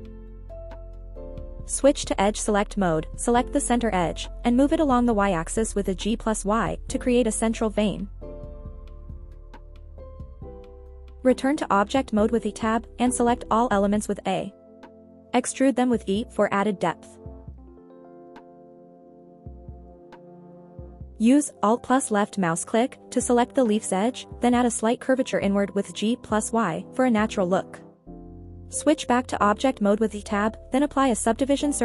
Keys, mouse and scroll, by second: 0.2 middle click, 2.2 scroll down 1, 2.5 middle click, 3.2 scroll up 2, 3.5 shift+middle click, 4.9 click, 5.3 scroll up 1, 6.5 click, 7.5 shift+click, 7.9 middle click, 8.3 scroll down 2, 8.6 middle click, 9.2 scroll up 1, 9.5 g, 9.6 y, 11.3 click, 11.5 middle click, 12.7 a, 13.0 e, 16.6 click, 16.9 middle click, 17.6 middle click, 18.1 g, 18.2 y, 19.8 click, 20.1 middle click, 20.6 Tab, 22.1 Tab, 22.4 middle click, 23.0 alt+click, 23.4 middle click, 24.4 g, 24.5 y, 26.6 click, 26.9 middle click, 28.4 middle click, 29.7 Tab, 30.4 ctrl+2.